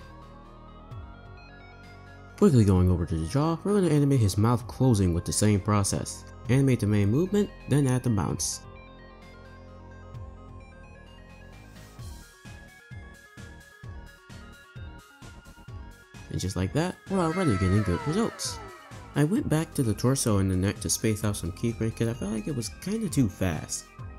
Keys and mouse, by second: 0.1 space, 1.5 space, 1.6 space, 1.7 space, 1.8 click, 4.5 click, 5.2 space, 5.4 space, 7.1 r, 9.2 space, 9.3 space, 9.4 r, 10.4 space, 10.5 space, 10.6 r, 11.9 Right, 12.0 Right, 12.4 r, 13.5 click, 13.8 shift+d, 14.6 click, 14.7 space, 15.2 space, 15.5 click, 16.1 space, 19.2 space, 20.9 click, 21.6 space, 22.6 space, 23.3-24.1 drag.